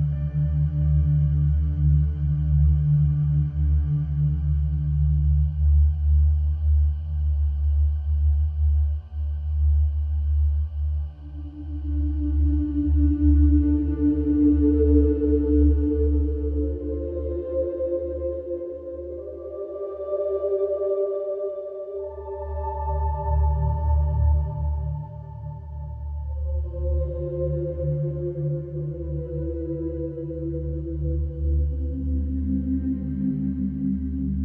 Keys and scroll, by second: 1.1 ctrl+d, 1.3 Escape, 6.8 4, 7.1 3, 10.2 4, 11.0 Delete, 19.1 Return, 19.7 2, 21.6 shift+f, 29.3 4.